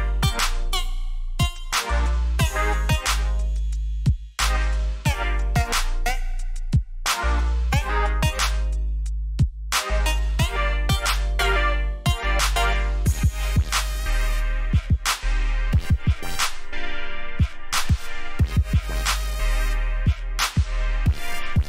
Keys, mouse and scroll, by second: 0.9 Escape, 2.5 click, 7.1 click, 19.1 click.